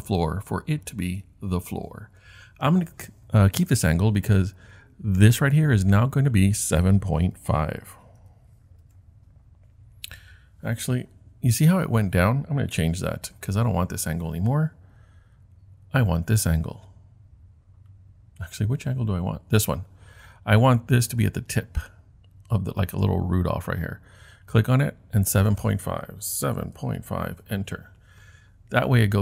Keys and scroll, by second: 7.3-8.2 typing, 8.8 Return, 9.9 typing, 13.1 super+z, 26.4-27.5 typing.